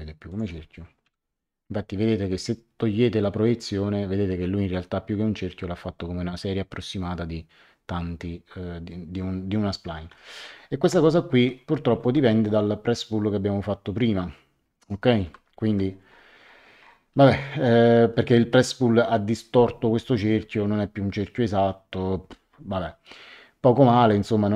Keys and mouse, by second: 0.2 click, 1.0 Delete, 10.3 ctrl+z, 11.9 ctrl+z, 15.2 ctrl+z.